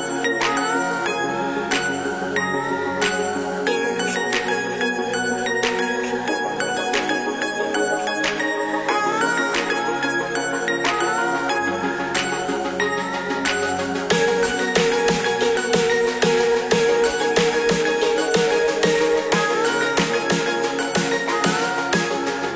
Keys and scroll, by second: 18.2 ctrl+c, 18.4 ctrl+v.